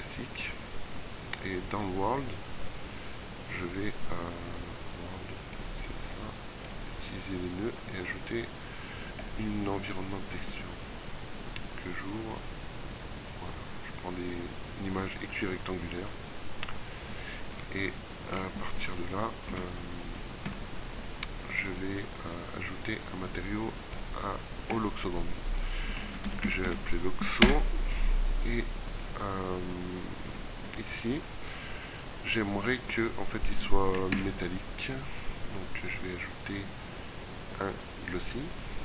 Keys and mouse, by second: 19.0 z, 19.6 z, 20.6 z, 24.1-33.0 drag, 33.4 shift+a.